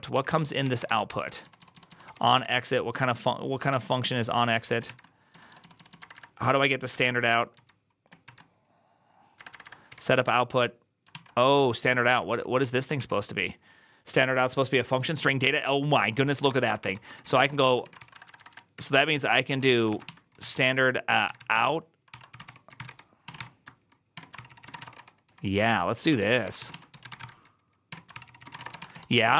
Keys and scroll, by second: 0.0-2.3 typing, 3.3-8.1 typing, 9.2-12.5 typing, 12.8 ctrl+c, 16.6 ctrl+^, 16.6 ctrl+c, 16.8 ctrl+c, 17.0-20.9 typing, 19.3 Return, 21.1 ctrl+n, 21.2 ctrl+n, 21.4 ctrl+y, 21.9 ctrl+c, 22.0-29.3 typing, 24.0 Tab.